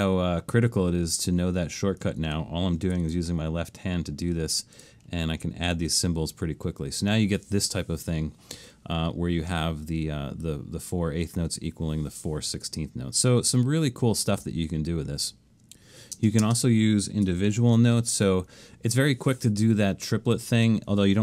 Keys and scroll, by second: 3.0 alt+shift+super+s, 16.2 space, 17.8 alt+shift+super+s.